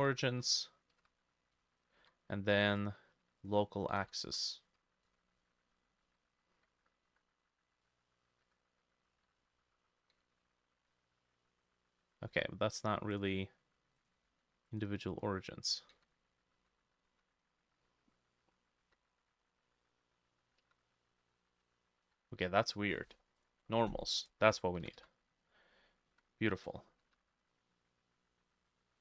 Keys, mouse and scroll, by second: 0.0 s, 0.1 x, 0.3 x, 1.6 s, 2.1 Escape, 4.0-7.1 typing, 5.4-9.1 drag, 6.1 Escape, 9.2 Escape, 9.2-14.4 drag, 9.4 middle click, 10.2 s, 10.4 x, 12.4 Escape, 15.2-24.1 drag, 16.0 s, 16.6 x, 17.1 x, 22.1 Escape, 24.8-29.0 drag, 24.8 s, 25.0 x, 26.1 z, 27.1 y.